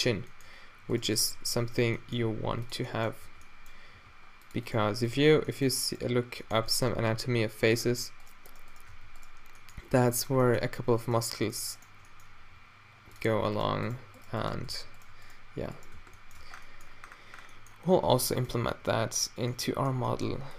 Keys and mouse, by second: 0.1 Tab, 1.7 middle drag, 2.3 g, 3.3-5.2 typing, 7.1 e, 7.7 g, 9.0 e, 9.0 f, 10.5 click, 12.5 e, 14.8 f, 16.0 f, 16.5 Tab, 18.2 Tab, 20.1 g.